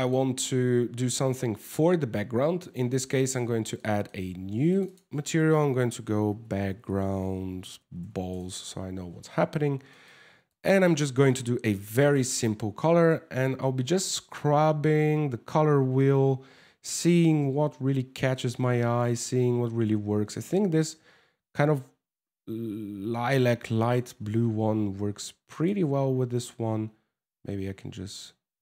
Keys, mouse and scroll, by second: 2.2 click, 3.4 shift+middle click, 4.3 click, 4.4 click, 9.0 scroll up 3, 9.5 shift+middle click, 10.1 click, 10.4 click, 11.6 click, 24.0 scroll up 5, 25.2 click, 27.1 w.